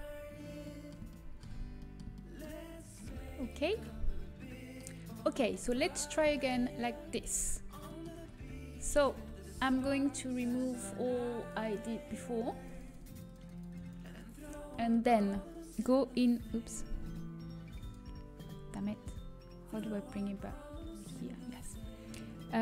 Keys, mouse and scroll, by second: 3.2 a, 7.5 a, 8.2 Tab, 8.8 click, 9.1 Tab, 9.7 a, 9.8 click, 11.3-19.5 drag, 14.4 Tab, 20.8-22.6 drag.